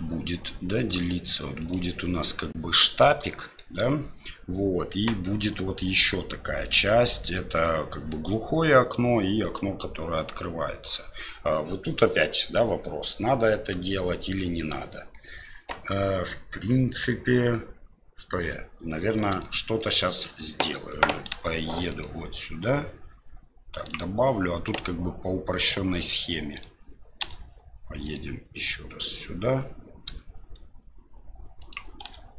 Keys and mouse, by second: 3.4 shift+middle click, 19.4 shift+middle click, 21.3 e, 27.3 e, 32.0 w.